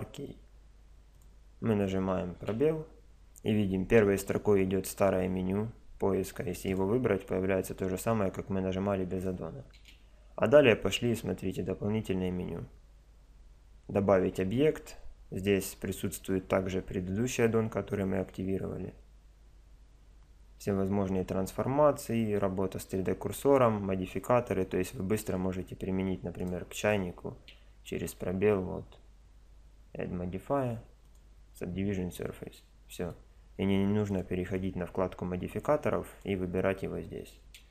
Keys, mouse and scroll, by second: 2.4 space, 9.7 space, 25.9 click, 26.7 click, 27.4 space, 28.1 click, 32.2 click, 34.1-35.9 drag, 36.1-37.7 drag.